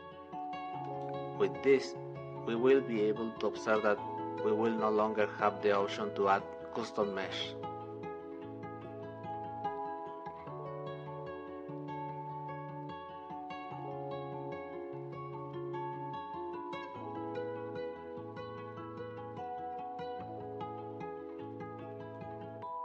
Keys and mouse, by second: 13.0-17.4 drag, 18.0-20.0 middle drag.